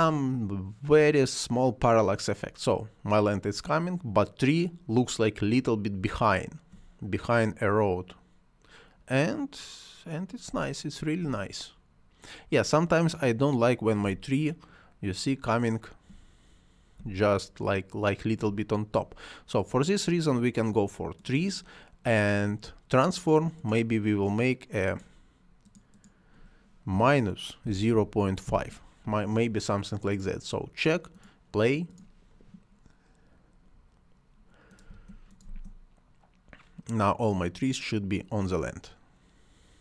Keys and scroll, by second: 5.8 space, 10.3 space, 13.8 space, 26.7 -, 27.8 5, 28.3 Return, 34.7 space.